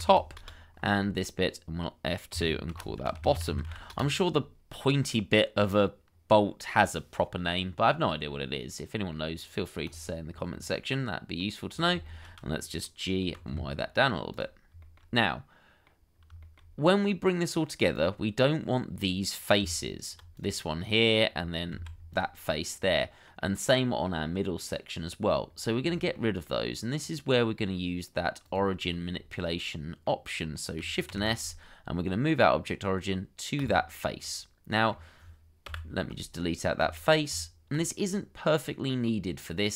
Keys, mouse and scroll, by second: 0.1 p, 0.4 Return, 2.3 F2, 3.0-3.7 typing, 3.9 Return, 7.5-8.0 scroll up 1, 8.0 middle click, 10.2 scroll down 1, 10.5 middle click, 12.0 shift+middle click, 12.8 scroll down 1, 13.0 middle click, 13.2 g, 13.5 y, 14.8 shift+middle click, 15.2 middle click, 16.1 scroll down 1, 16.4 shift+middle click, 18.0 middle click, 19.6 Tab, 20.8 middle click, 21.7 alt+q, 22.8 middle click, 25.4-25.8 scroll up 1, 25.9 shift+middle click, 26.4 middle click, 28.9 shift+middle click, 29.4 middle click, 31.1 shift+s, 34.2 middle click, 35.6 Delete, 37.3 Tab, 38.0 middle click.